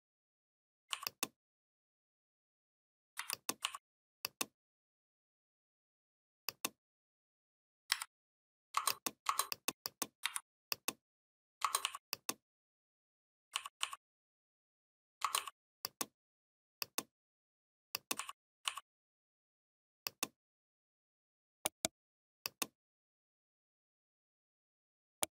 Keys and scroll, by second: 3.0 v, 7.8 a, 10.1 v.